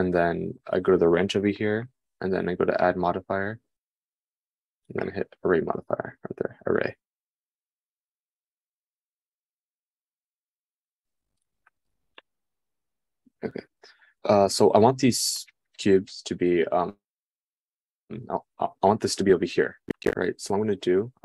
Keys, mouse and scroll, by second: 6.3-8.3 drag, 8.3-21.2 middle drag.